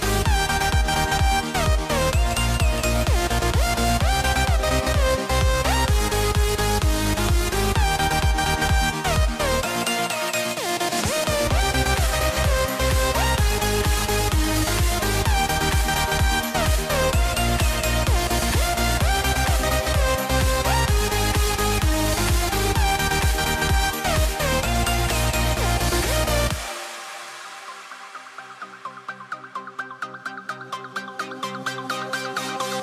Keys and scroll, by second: 1.6 a, 5.3 a, 9.1 a, 12.5 a, 13.9 a, 15.1 super+z, 15.2 a, 22.4 super+z, 22.6 super+z, 26.7 a, 32.4 a.